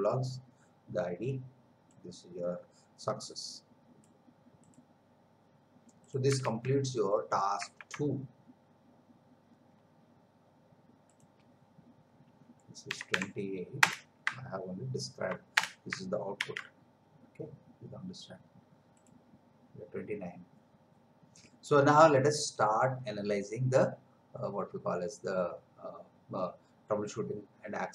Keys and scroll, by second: 6.6 alt+Tab, 7.8 alt+Tab, 12.9 2, 13.8 Return, 15.6 Return, 16.4 ctrl+v.